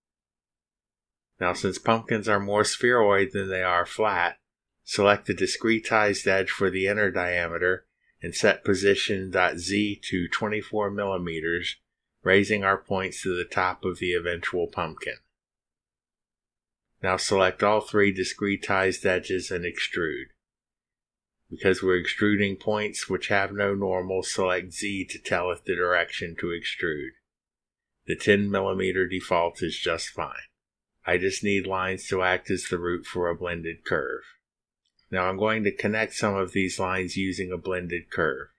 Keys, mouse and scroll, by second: 0.3 click, 0.9 click, 5.7 click, 7.3 click, 8.6 click, 10.5 2, 10.8 4, 12.2 click, 18.3 scroll up 1, 19.7 ctrl+click, 20.5 ctrl+click, 21.2 ctrl+click, 27.1 click, 30.2 click, 32.8 click.